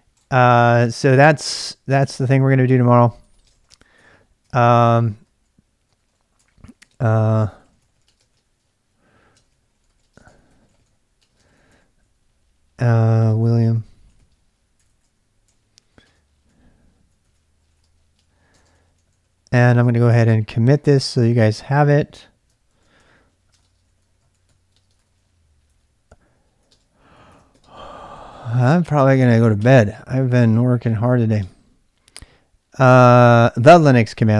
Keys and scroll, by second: 2.9-11.7 typing, 4.4 ctrl+[, 13.0-30.1 typing, 31.1-31.9 typing.